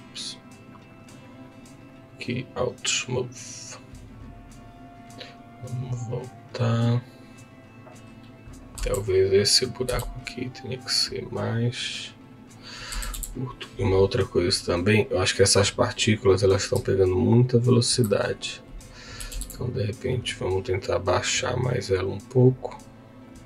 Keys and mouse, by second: 0.5-1.9 drag, 1.9-3.1 right drag, 4.2-5.2 drag, 8.7 Tab, 9.8 s, 12.2 click, 13.1 Tab, 13.1 KP_1, 15.3-16.8 drag, 17.5 ctrl+click, 19.2 g, 19.3 z, 23.3 click.